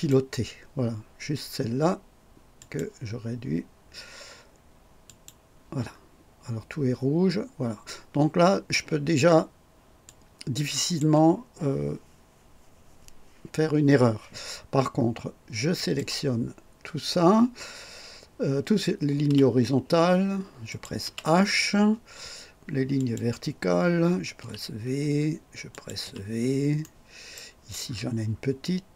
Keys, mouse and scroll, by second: 2.6 click, 5.1 click, 6.1 scroll down 1, 7.0 scroll up 2, 10.1-11.2 drag, 15.8 click, 19.3 h, 20.7 click, 21.0 typing, 23.0 click, 24.4 typing, 25.7 click, 26.0 typing, 26.8-27.5 right drag, 27.8-28.1 scroll up 1.